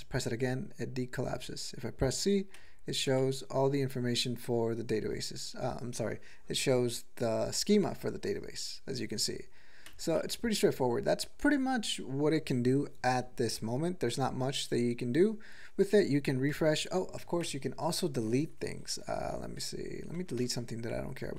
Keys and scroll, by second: 0.8 Return, 1.2 Return, 2.6 c, 3.1 c, 9.9 c, 10.2 c, 10.9 Return, 11.4 Return, 11.8 Return, 16.5-21.2 typing.